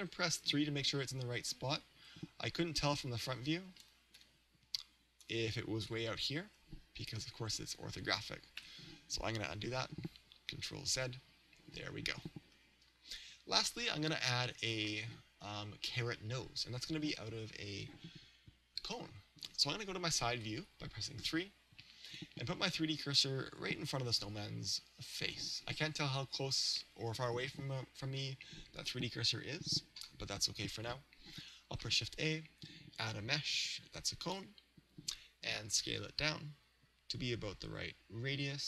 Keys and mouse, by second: 0.5 KP_3, 2.8-4.9 right drag, 4.2 g, 6.0 click, 6.6 KP_1, 8.6 KP_3, 10.9 ctrl+z, 12.5 KP_1, 20.3 KP_3, 22.1 click, 31.9 shift+a, 35.9 s.